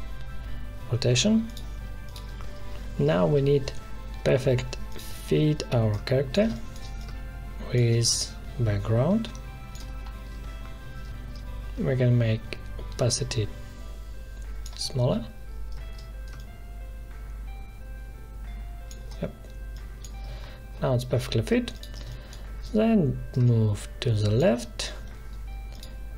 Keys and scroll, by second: 6.4 space, 22.0 space.